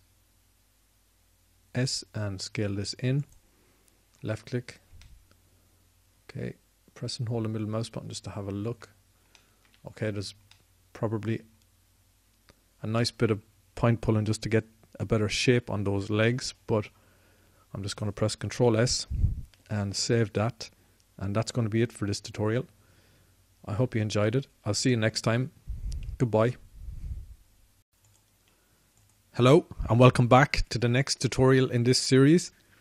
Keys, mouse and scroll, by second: 0.2 s, 19.3 ctrl+s, 28.2 a.